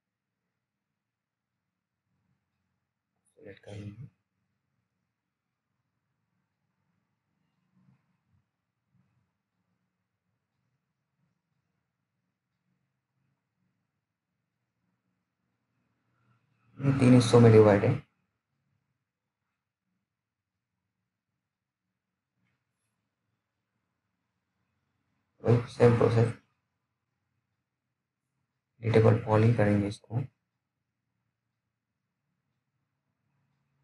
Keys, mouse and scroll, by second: 3.0 click, 5.7-6.1 scroll down 1, 6.2 alt+middle click, 6.9-7.7 alt+scroll up 2, 7.7 middle click, 7.8 middle click, 7.8 middle click, 8.4-9.6 scroll up 1, 9.6-10.7 scroll down 1, 10.7 click, 11.1 middle click, 11.2 middle click, 12.6 click, 22.0 click, 22.5-23.5 scroll down 1, 23.5 t, 24.6 click, 27.9-29.7 scroll down 1, 29.7 F3, 30.6-31.8 scroll down 1, 31.8 F3.